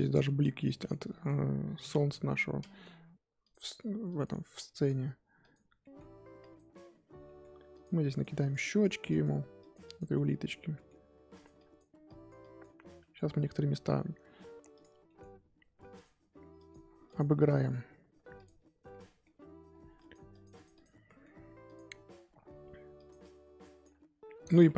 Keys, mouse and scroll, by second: 2.9 f, 4.1-5.8 drag, 5.8 middle click, 6.4 click, 7.2 middle click, 7.7-10.2 drag, 10.2-11.3 middle drag, 11.3-13.0 drag, 13.0-14.8 middle drag, 14.8 click, 15.0 middle click, 16.0 click, 16.5 click, 17.4 f, 18.9 middle click, 19.3-19.9 scroll up 1, 19.9-21.0 drag, 21.0 middle click, 21.6 click, 22.3 f, 23.2-24.5 drag, 24.5 ctrl+z.